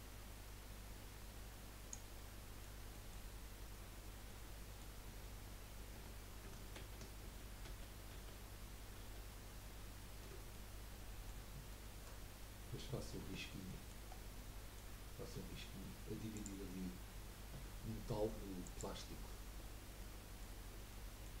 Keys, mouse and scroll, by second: 2.1 middle click, 3.1 scroll up 1, 4.0 scroll down 2, 4.2 middle click, 5.0 Tab, 5.9 Tab, 6.8 ctrl+z, 7.2 ctrl+z, 7.6 ctrl+z, 8.1 ctrl+z, 9.0 ctrl+z, 10.5-12.2 middle drag, 12.2-13.2 scroll up 1, 13.2 Tab, 13.6 middle click, 14.1 scroll down 3, 14.3-16.7 middle drag, 19.6-20.0 scroll down 3, 20.0-20.6 middle drag, 20.6 scroll down 1, 20.9-21.4 middle drag.